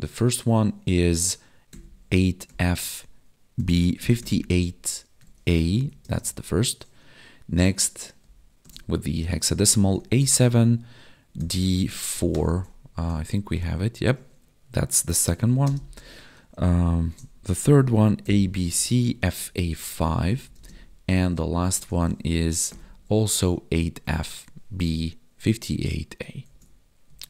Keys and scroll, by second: 6.0 space, 13.5 Tab, 15.5 space, 20.5 space, 24.0 Tab, 26.4 ctrl+s, 27.0 Right.